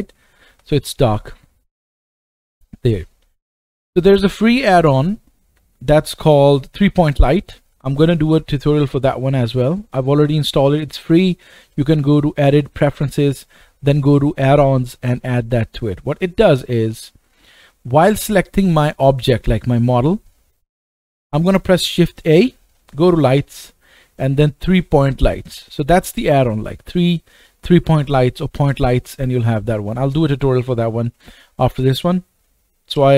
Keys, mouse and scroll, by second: 0.5 KP_0, 12.6-19.2 drag, 22.2 shift+a.